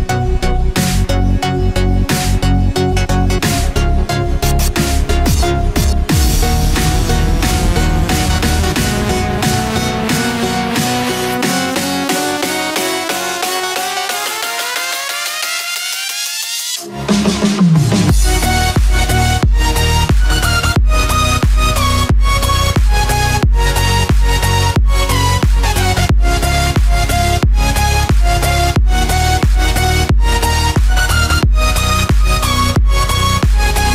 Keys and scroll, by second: 0.1 ctrl+-, 6.1 ctrl+0, 19.1 ctrl+j.